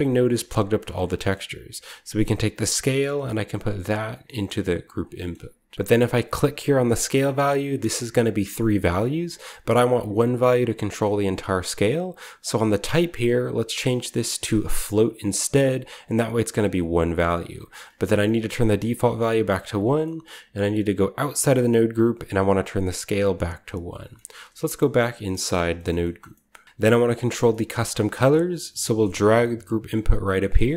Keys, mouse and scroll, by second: 0.6 scroll down 1, 0.8-1.9 scroll up 1, 0.9 middle click, 1.2-2.6 middle drag, 1.9-2.6 scroll up 1, 2.6-4.0 drag, 2.6-3.1 scroll up 1, 4.6 click, 4.6 middle click, 5.4 click, 6.8 click, 12.8 click, 15.4 click, 18.6 click, 19.1 1, 19.4 click, 19.9-21.0 middle drag, 21.2 Tab, 21.6-22.6 scroll up 1, 22.6-25.3 drag, 22.6-23.4 scroll up 1, 23.1 1, 24.4 Tab, 25.5 middle click, 25.8 middle click, 26.1 middle click, 26.4 middle click, 26.6-27.0 scroll up 1, 26.6 z, 26.6 g, 27.0 scroll down 1, 27.2 scroll up 1, 27.4-29.8 scroll down 1, 27.6-29.1 middle drag, 27.9-29.1 drag, 29.1 g, 30.6-30.7 scroll up 1.